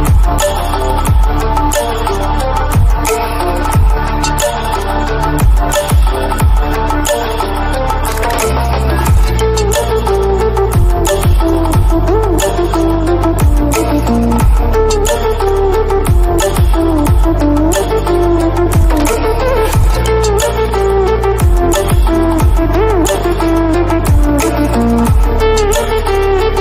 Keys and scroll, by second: 0.4 ctrl+=, 0.8 ctrl+-, 18.9 shift+a.